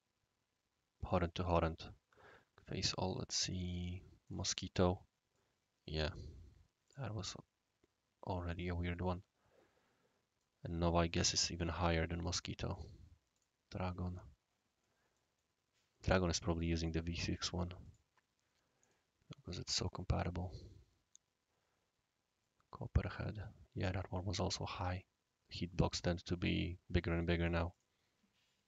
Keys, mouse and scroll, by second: 3.4 click, 4.2 click, 5.3-6.1 right drag, 6.8 click, 7.2-10.4 right drag, 11.8 click, 12.7 click, 13.3 click, 13.8-14.8 drag, 14.8-16.0 middle drag, 15.4-16.0 right drag, 16.6 click, 17.8 click, 18.8 click, 19.8 click, 22.4-24.0 right drag, 24.9 scroll down 1, 25.0 scroll up 1, 25.2 scroll down 1, 27.7 click.